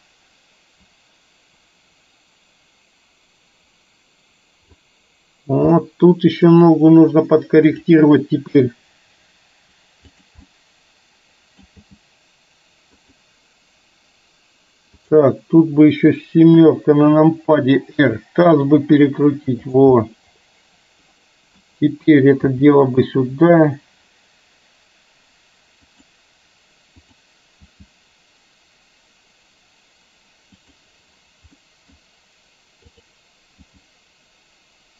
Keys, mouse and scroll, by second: 5.8-6.5 middle drag, 7.8 click, 8.7 g, 10.4-11.7 middle drag, 11.9 g, 15.0 click, 16.7 KP_7, 18.2 r, 20.2-21.7 middle drag, 22.5 g, 27.2 click, 27.7 g, 31.5-32.0 middle drag, 33.0 click, 33.7 g.